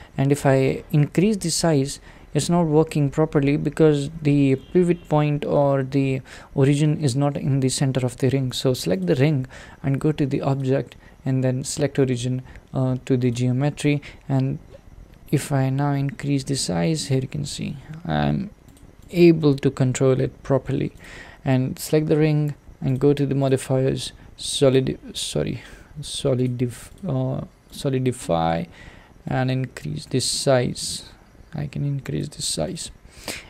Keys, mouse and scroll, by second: 0.6-1.2 middle drag, 1.2 s, 8.6 click, 9.0 click, 13.3 click, 14.2 scroll up 2, 15.3 s, 16.9-17.7 middle drag, 17.7 s, 19.1 click, 19.4-21.0 middle drag, 21.0 click, 24.9-28.2 drag, 28.2-29.4 middle drag, 29.4-32.7 drag, 33.1 scroll down 2.